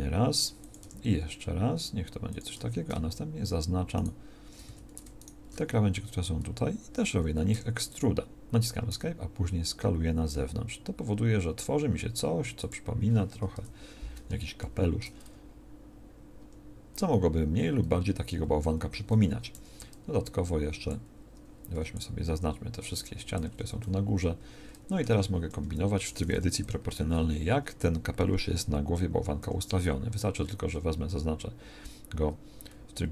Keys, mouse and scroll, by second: 2.5 a, 4.6 a, 7.5 e, 8.9 s, 13.5 KP_1, 15.2 Tab, 16.3 Tab, 19.2 z, 19.5 b, 21.7 c, 25.5 KP_1, 26.5 o, 29.4 g.